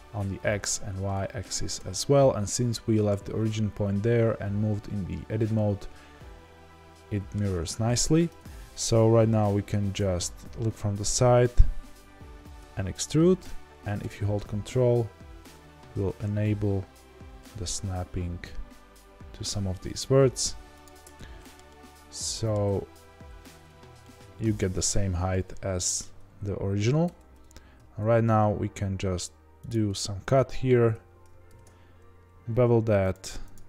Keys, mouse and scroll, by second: 1.1 middle click, 1.7 Tab, 5.5-8.3 middle drag, 8.3 Tab, 9.9 KP_1, 11.0-12.5 scroll up 2, 12.5 e, 21.0-23.0 ctrl+middle drag, 23.0 z, 23.6 Tab, 24.0-27.0 middle drag, 27.0 Tab, 27.9 ctrl+r, 33.1 click, 33.2 3, 33.5 click.